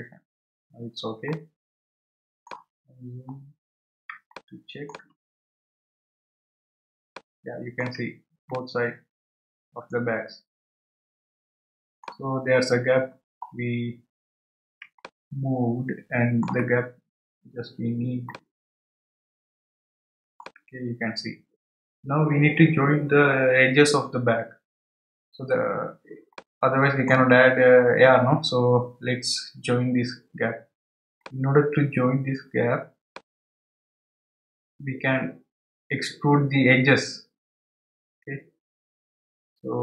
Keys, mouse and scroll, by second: 0.7 scroll down 3, 1.3-3.0 middle drag, 3.0-3.5 scroll up 4, 4.1 scroll up 2, 4.3-5.4 shift+middle drag, 5.4 scroll up 1, 8.9-11.5 middle drag, 12.8 scroll up 2, 13.5-14.8 scroll down 3, 15.0-17.2 shift+middle drag, 17.2-17.6 scroll up 2, 18.3-21.3 shift+middle drag, 25.3-26.3 scroll down 1, 26.3-29.4 middle drag, 31.2-34.3 middle drag.